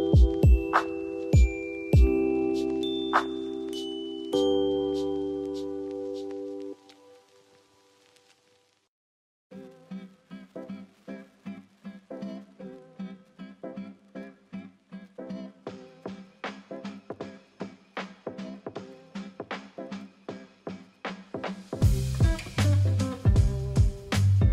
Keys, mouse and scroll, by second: 1.9 ctrl+t, 6.3 click, 13.8 ctrl+click.